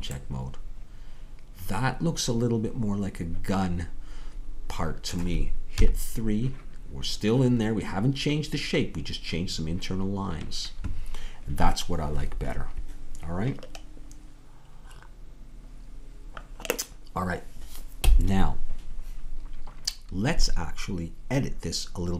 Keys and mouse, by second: 0.3-2.2 middle drag, 5.8 KP_3.